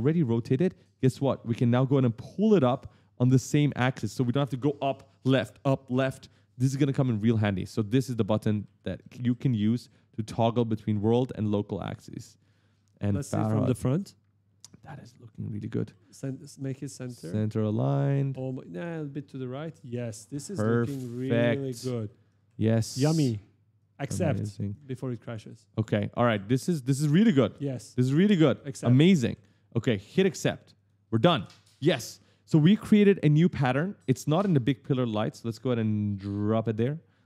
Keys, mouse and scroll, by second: 1.4 click, 3.5 right click, 8.1 right click, 10.8 click, 12.2 right click, 14.4 right click, 15.5 w, 15.9 e, 17.3 click, 19.8 right click, 21.2-23.0 typing, 24.5 right click, 27.3 w, 27.7 q, 28.5 a, 30.6 click, 35.6 click.